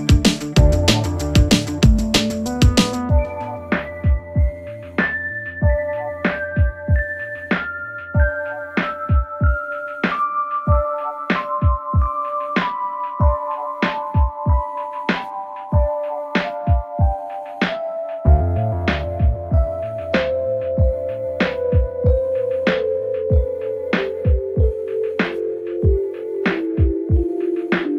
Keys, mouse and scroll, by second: 3.4 v, 3.9-7.8 drag, 10.4 ctrl+t, 12.0-18.4 alt+drag, 18.4 Return, 23.8 right click, 25.6 click.